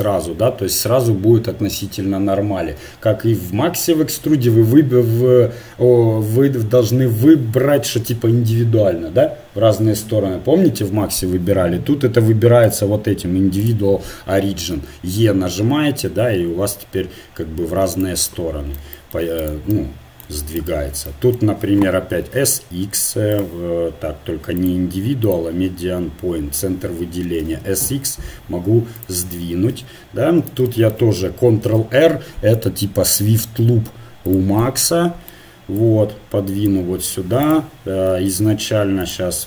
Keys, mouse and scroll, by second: 12.7-14.5 drag, 14.7 e, 19.4-21.1 right drag, 21.1-22.3 drag, 22.3 s, 25.9 click, 27.3 s, 29.7 KP_1, 31.7 ctrl+r, 35.7 click, 38.2 right click, 38.4 ctrl+Tab.